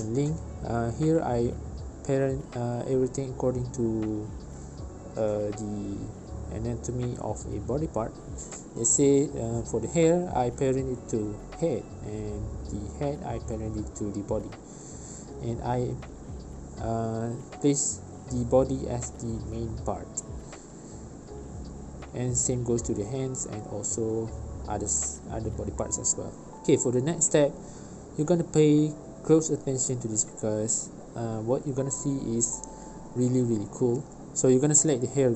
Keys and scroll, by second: 12.9 w, 21.4 v.